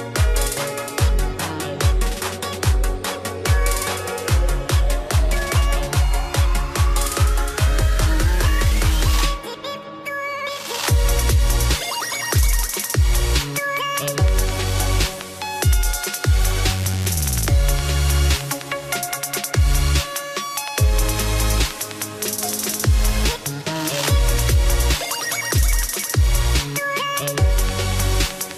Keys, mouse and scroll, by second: 0.4 click, 1.7 click, 3.2 click, 3.7 right click, 4.4 click, 7.7 click, 8.2 scroll, 9.1 click, 10.5 click, 11.7 click, 12.8 scroll, 13.3 click, 15.3 click, 15.9 ctrl+x, 16.1 click, 17.6 ctrl+f, 20.0 click, 21.9-22.3 scroll, 22.9 click.